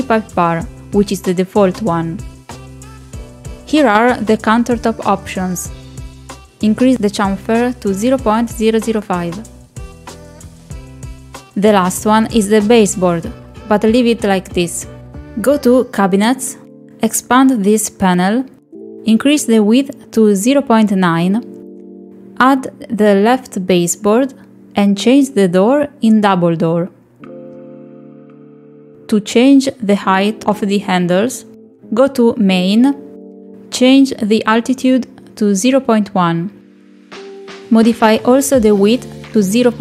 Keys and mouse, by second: 0.9 click, 6.8 middle click, 10.2 click, 13.2 middle click, 13.7 middle click, 14.2 shift+middle click, 14.6 middle click, 15.0 shift+middle click, 15.4 middle click, 17.6 click, 19.5 click, 22.4-24.0 drag, 25.9 click, 27.3-28.8 drag, 37.2 click, 38.2 click, 38.5 click.